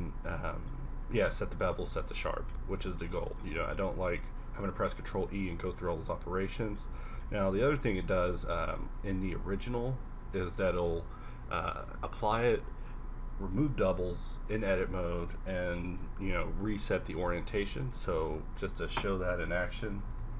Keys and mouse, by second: 0.2 middle click, 1.3 Tab, 1.9 Tab, 5.8 a, 8.8 q.